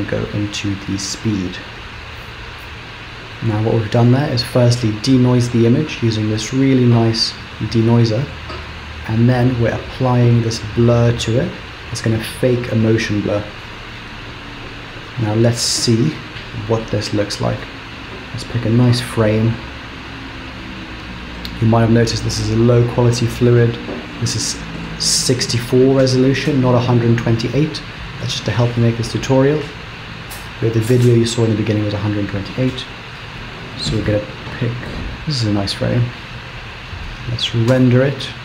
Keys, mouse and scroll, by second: 14.8 ctrl+space, 14.9 click, 16.1 space, 18.4-18.9 scroll down 6, 20.5 click, 23.6-24.1 scroll up 3, 24.2-25.2 scroll down 1, 32.2-32.6 scroll down 2, 32.8-33.4 scroll up 1, 33.8 click, 37.4 click.